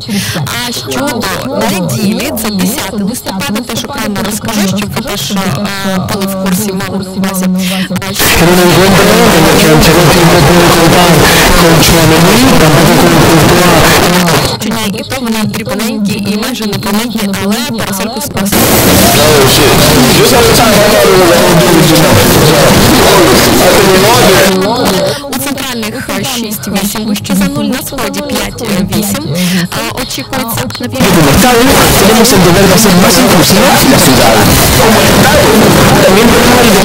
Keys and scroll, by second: 7.6 typing, 14.0 Page_Down, 24.5 Page_Down.